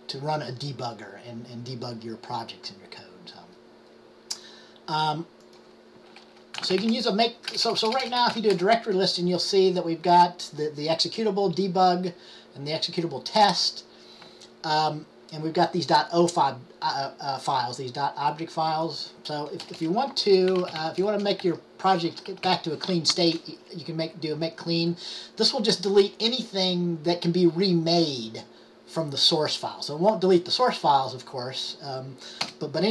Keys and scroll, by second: 6.5-7.4 typing, 8.5 d, 20.4-23.1 typing.